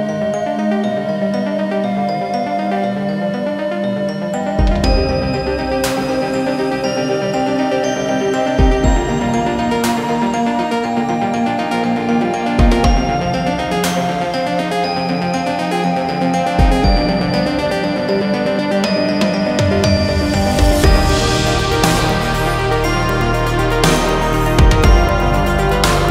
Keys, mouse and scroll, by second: 0.2-1.8 middle drag, 1.8 click, 3.3 ctrl+b, 6.3 click, 6.7-8.5 middle drag, 8.5-9.1 scroll up 2, 9.1 ctrl+r, 12.1 ctrl+r, 14.3 click, 15.0 KP_7, 16.1 click, 18.1 shift+click, 19.2 shift+click, 20.3 shift+click, 25.1-26.1 middle drag.